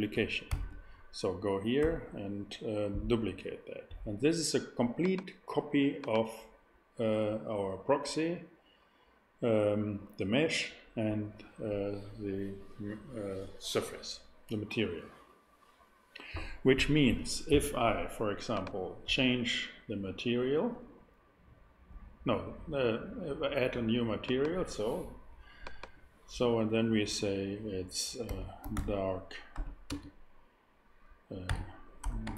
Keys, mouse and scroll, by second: 0.5 shift+d, 0.5 shift+d, 1.8 x, 8.1-18.5 middle drag, 18.5-20.6 drag, 24.2-28.2 drag, 28.2-29.9 typing, 31.4-32.3 typing.